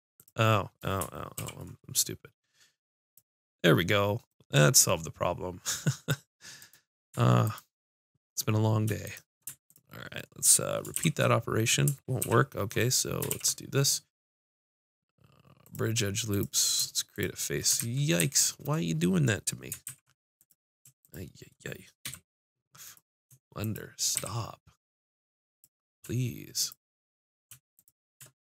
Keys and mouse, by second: 1.4 ctrl+e, 6.6-11.5 drag, 10.9 shift+r, 12.2 ctrl+w, 13.3 ctrl+e, 16.3 click, 17.8 ctrl+z, 18.2 ctrl+z, 19.8 ctrl+z, 20.4-22.1 drag, 22.1 f, 24.1 f, 24.2 click, 25.5-26.7 drag.